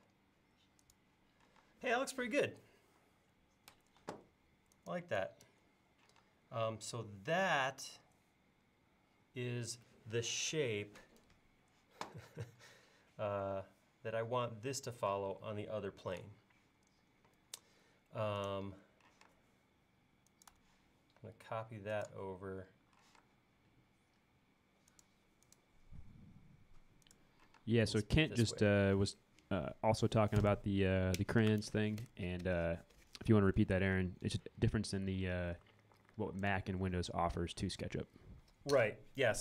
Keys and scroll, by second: 1.6 space, 4.0 e, 6.2 space, 19.2 m, 23.1 q, 27.6 space.